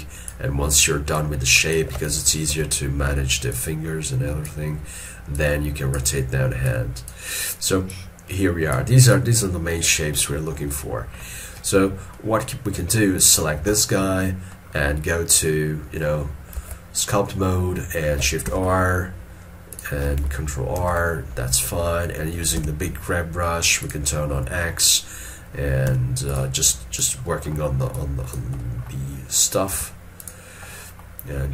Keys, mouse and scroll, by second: 2.6 ctrl+z, 9.2 double click, 10.3 scroll up 1, 10.3 shift+middle click, 10.8 shift+middle click, 13.9 shift+middle click, 14.3 scroll up 1, 16.7 ctrl+Tab, 18.6 shift+r, 20.9 ctrl+r, 25.0 g, 26.0 f, 26.8 double click, 29.8 f, 30.8 middle click.